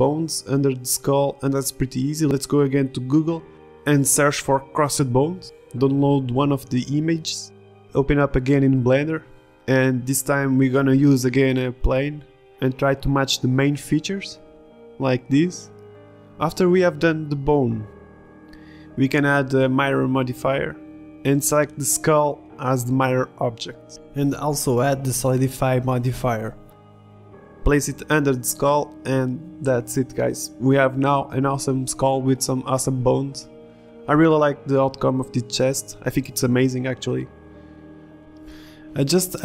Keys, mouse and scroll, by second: 5.3 ctrl+shift+z, 7.0 middle click, 7.0 click, 7.7 click, 8.7 click, 9.0-10.0 drag, 10.2-17.6 typing, 13.3 ctrl+r, 13.9 ctrl+r, 15.8 ctrl+r, 16.9 ctrl+r, 17.4 click, 18.4 Tab, 19.5-20.6 middle drag, 21.6 middle click, 23.4 middle drag, 23.6 click, 23.8 g, 24.6 z, 24.8 click, 25.2 r, 26.2-26.8 drag, 27.3 middle click, 27.7 g, 28.1 s, 28.5 g, 32.4 middle click, 32.7 a, 33.0 click, 33.4 right drag, 33.4 s, 34.7 right drag, 34.8 Tab, 34.9 a, 35.0 b, 35.9 Tab, 36.0-36.4 drag, 36.0-36.4 right drag, 36.4 ctrl+z, 36.8 g, 37.7 g, 38.1 g, 38.8-39.3 drag.